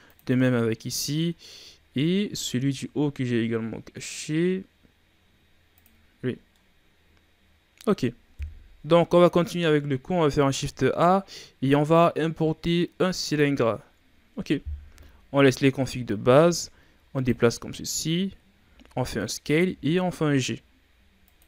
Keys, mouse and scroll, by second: 0.0 click, 0.6 scroll down 2, 0.8 middle click, 1.7-2.6 shift+scroll up 5, 2.6 scroll down 2, 3.0-3.4 scroll up 2, 3.4-4.3 scroll down 1, 4.3-5.7 scroll up 3, 5.7 click, 6.3 scroll down 2, 6.4-8.3 middle drag, 8.3 KP_1, 10.2 shift+a, 14.7 KP_3, 15.6 Tab, 16.5-17.7 drag, 17.7-18.0 shift+scroll down 1, 18.0-18.5 scroll up 4, 18.5 s, 19.6 g.